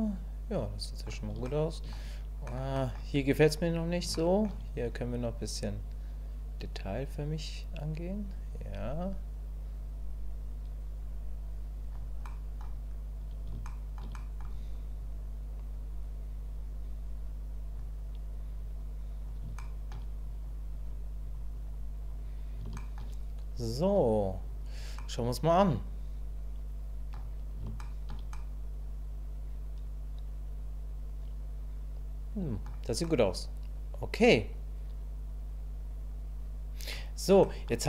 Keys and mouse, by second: 1.5 shift+click, 2.5 click, 2.8 click, 4.2 shift+click, 5.1-11.9 drag, 12.3 click, 13.7 shift+middle click, 14.1 middle click, 15.0-17.8 drag, 18.6 click, 19.6 shift+middle click, 20.3 click, 20.7 click, 21.2 click, 21.5 click, 22.0 click, 22.8 shift+click, 23.9 click, 25.0-27.1 drag, 27.8 shift+click, 28.3-32.6 drag, 33.0-36.9 drag, 37.5 middle click.